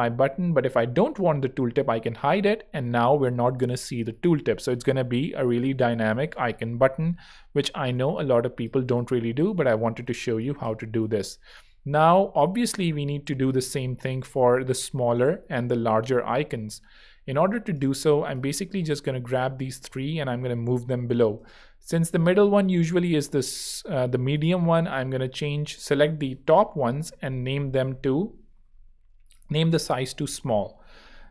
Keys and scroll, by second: 0.0 super+2, 1.8 super+3, 12.0 shift+Right, 13.3 shift+Left, 14.5 super+x, 26.4 alt+l, 28.0 alt+super+], 29.2-30.5 typing.